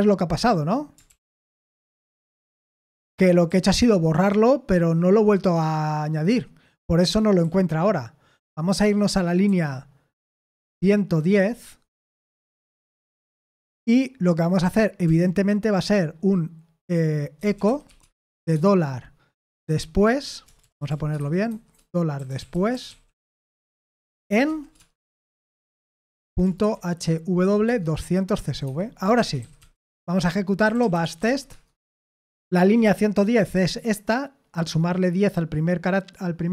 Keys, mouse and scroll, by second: 1.1 ctrl+p, 1.6 ctrl+p, 2.6 Return, 3.4-4.9 typing, 7.4-8.2 k, 9.4 f, 10.7-15.0 typing, 17.1-24.8 typing, 26.3-31.7 typing, 28.6 Escape, 31.9 Return.